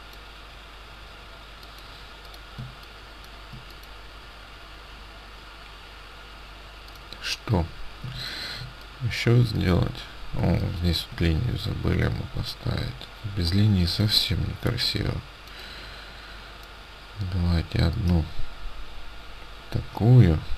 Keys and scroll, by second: 2.7 space, 8.1 ctrl+space, 10.5 ctrl+space.